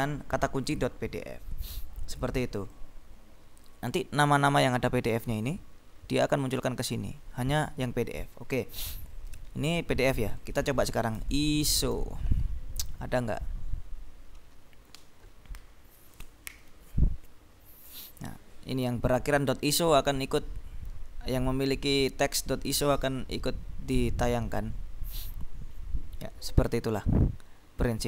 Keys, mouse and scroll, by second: 1.6-2.1 scroll up 2, 2.9 click, 3.1 middle click, 3.4 click, 3.5 click, 4.9-5.5 scroll down 3, 6.7-7.9 scroll up 2, 10.5 click, 11.2 ctrl+BackSpace, 11.7 ctrl+i, 11.8 ctrl+s, 12.1 ctrl+o, 23.0-24.4 scroll down 4, 24.4-25.4 scroll up 2, 25.8-26.8 scroll down 2.